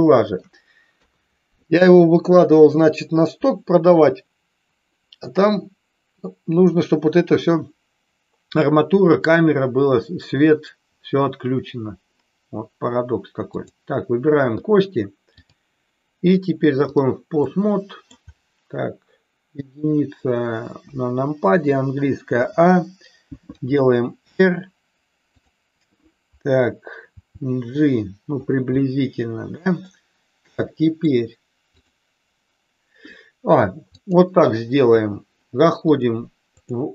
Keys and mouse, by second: 0.9 KP_3, 13.5 click, 15.3-17.0 drag, 17.4-18.0 middle drag, 20.8 KP_1, 22.4 a, 23.4 r, 27.0 g, 28.3 click, 28.8-29.8 middle drag, 30.5 middle click, 31.6 click, 33.9-35.0 drag, 35.8-36.8 drag.